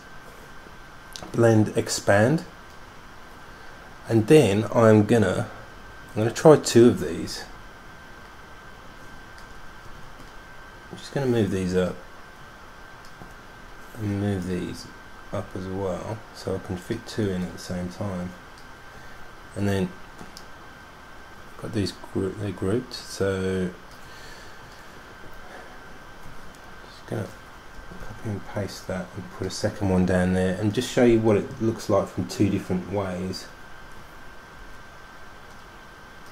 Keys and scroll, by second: 10.0 super+g, 28.0 super+c, 28.2 super+f, 34.8 super+z.